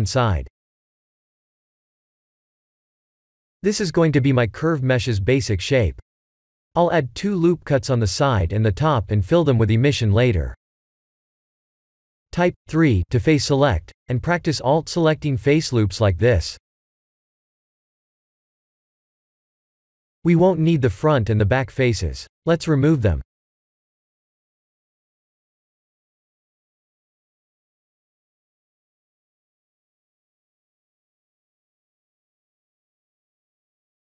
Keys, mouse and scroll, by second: 0.6 ctrl+z, 0.9 ctrl+z, 1.4 ctrl+z, 1.8 ctrl+z, 2.2-3.2 middle drag, 3.7 ctrl+r, 5.8 right click, 6.4-8.0 middle drag, 9.1 ctrl+r, 10.2 right click, 11.6 3, 13.3 alt+click, 16.9 alt+shift+click, 17.9 alt+shift+click, 19.9 click, 20.6 alt+shift+click, 21.1 shift+click, 21.5 shift+click, 21.9 shift+click, 22.3 shift+drag, 22.6 shift+click, 23.1 shift+click, 23.6 shift+click, 24.4 middle click, 25.4 shift+click, 25.7 shift+click, 26.1 shift+click, 26.5 shift+click, 27.0 shift+click, 27.4 shift+click, 28.0 shift+click, 28.3 shift+click, 28.8 shift+click, 29.3 shift+click, 29.7 shift+click, 30.2 shift+click, 30.7 middle click, 31.6 x.